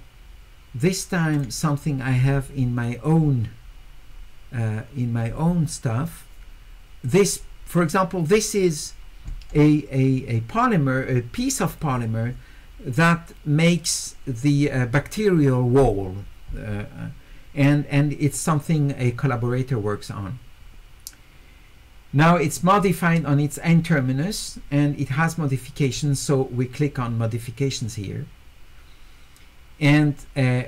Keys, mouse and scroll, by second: 1.3 click, 7.0 click, 8.3 click, 25.8 click.